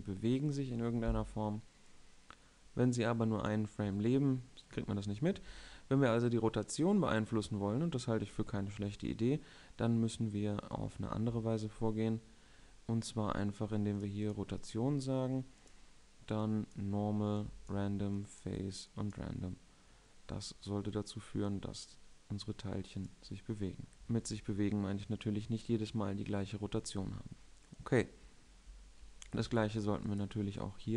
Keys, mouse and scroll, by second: 2.7-6.0 middle drag, 14.7-23.5 middle drag, 24.2 alt+a, 24.8 alt+a, 29.3-30.9 middle drag, 30.2 2.